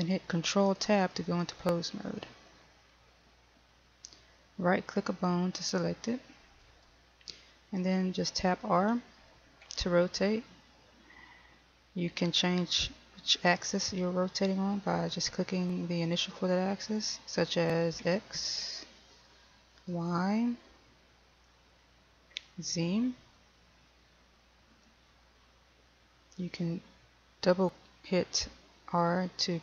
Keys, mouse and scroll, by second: 1.2 ctrl+Tab, 5.6 right click, 9.9 r, 18.2 x, 19.9 y, 22.5 z, 24.9 y.